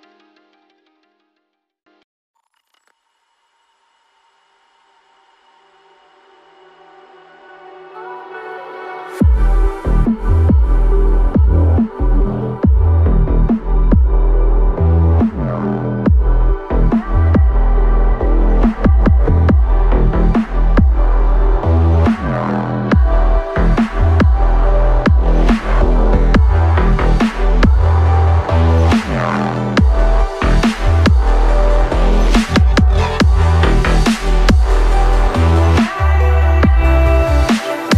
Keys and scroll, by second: 1.7 alt+a, 4.6 alt+a, 9.5 ctrl+a, 10.3 alt+a, 30.2 ctrl+a.